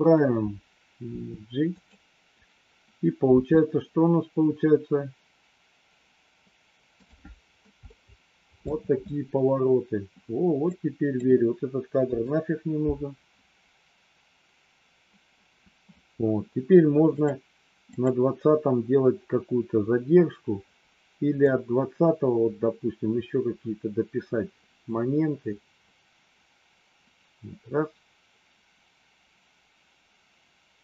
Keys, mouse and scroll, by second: 1.1 g, 3.2 space, 7.0 click, 7.7 middle click, 10.6 click, 12.0 Delete, 17.0 click, 17.9 click, 21.4-30.8 drag.